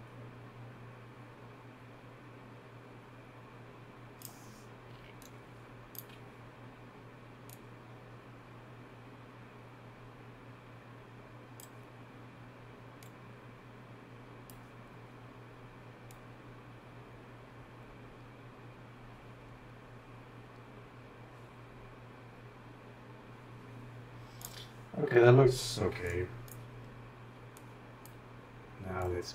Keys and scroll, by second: 5.0-6.0 typing, 25.9-26.5 typing, 28.8-29.3 typing.